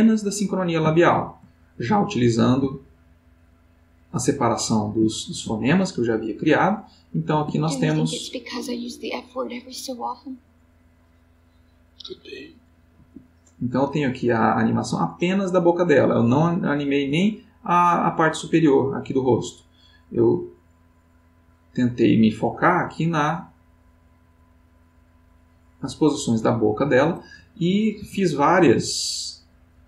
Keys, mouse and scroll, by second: 0.9 ctrl+middle click, 1.5 ctrl+middle click, 2.1 ctrl+middle click, 2.8 ctrl+middle click, 5.1 ctrl+middle click, 7.3 space, 12.9 Escape, 14.5-17.4 drag, 19.5-25.8 drag, 25.9-26.7 middle drag, 27.5 ctrl+middle click, 28.2-28.7 ctrl+middle drag, 29.2-29.8 ctrl+drag.